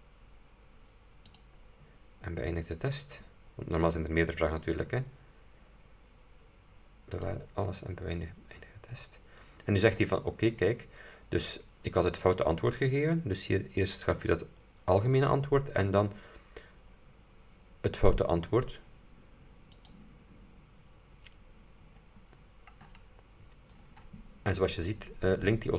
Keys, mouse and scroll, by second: 1.4 click, 4.8 click, 7.2 click, 10.5 scroll down 2, 19.8 click.